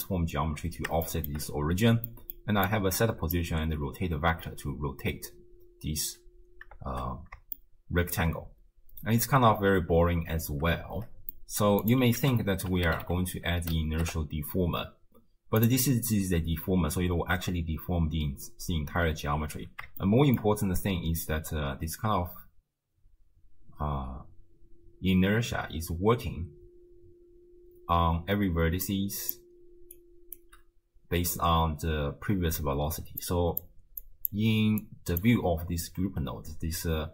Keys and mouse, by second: 1.3 shift+middle click, 2.1 middle click, 2.7 right click, 4.5 space, 6.0 space, 6.9 shift+space, 7.8-8.2 shift+drag, 8.5 space, 10.2 space, 10.9 shift+space, 11.3 click, 11.8 click, 12.2 ctrl+a, 20.0-20.4 shift+middle drag, 20.4 click, 24.0 space, 27.1 space, 28.7-29.9 d, 28.9 click, 29.9-31.2 drag, 30.4 d, 31.2-34.8 d, 33.2 click, 34.0 click, 35.1 click, 35.2 d, 36.7-37.1 typing.